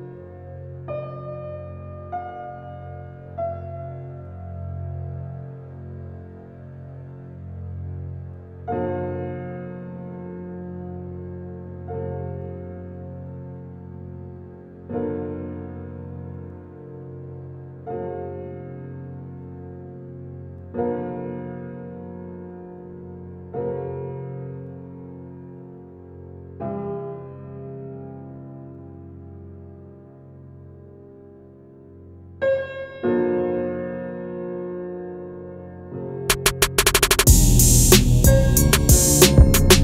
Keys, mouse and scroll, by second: 3.7 click, 5.5 scroll up 1, 6.1-6.6 scroll down 1, 6.6 scroll up 1, 7.0-7.7 scroll down 1, 7.7 scroll down 1, 8.5 scroll down 1, 14.5 click, 20.0 click, 22.4 click, 24.9 click.